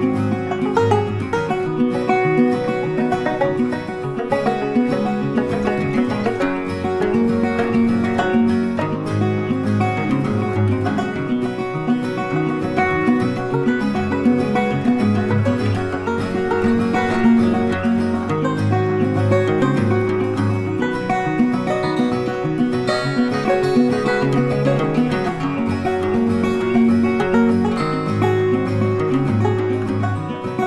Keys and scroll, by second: 30.1 ctrl+t.